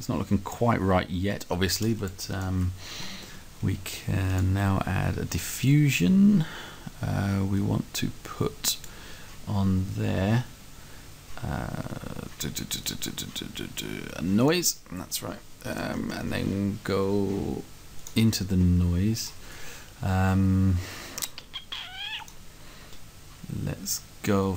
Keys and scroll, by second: 2.6 Right, 19.6 Right.